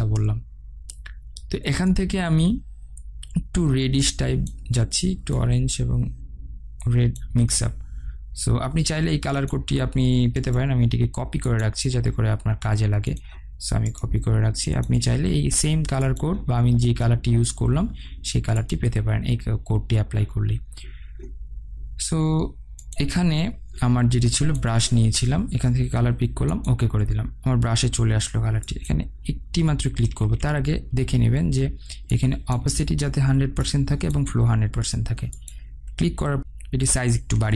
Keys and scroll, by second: 30.0 ctrl+z, 36.4 ctrl+t.